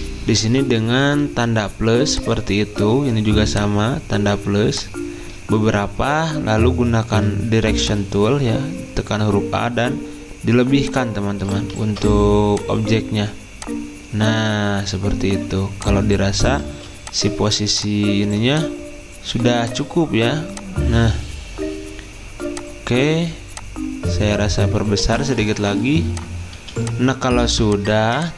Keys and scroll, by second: 1.0 =, 11.9 ctrl+z, 16.7 ctrl+z, 26.5 z.